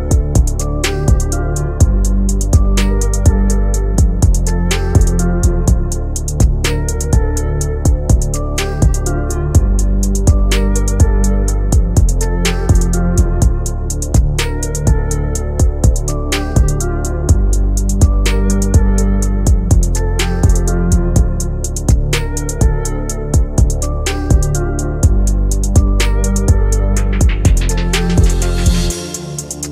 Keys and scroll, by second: 15.9 F3, 16.7 Escape, 17.6 Delete, 22.2 shift+F2, 22.4 Escape, 23.1 Delete.